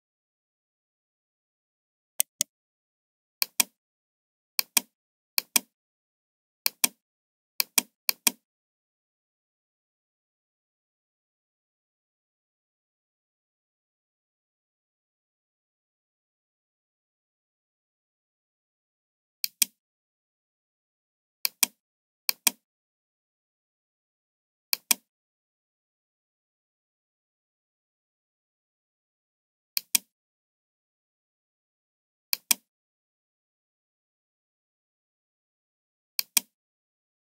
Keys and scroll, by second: 15.4 ctrl+d.